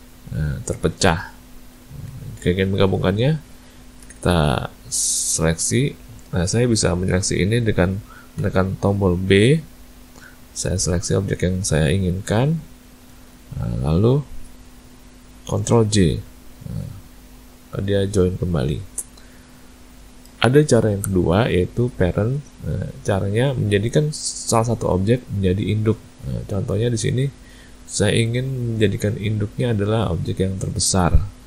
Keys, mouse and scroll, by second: 1.1 click, 1.7 click, 2.1 ctrl+z, 2.7 a, 2.8 a, 4.0 b, 15.7 ctrl+j, 17.2 click, 18.7 a, 18.9 a, 19.9 ctrl+middle click, 30.6 click.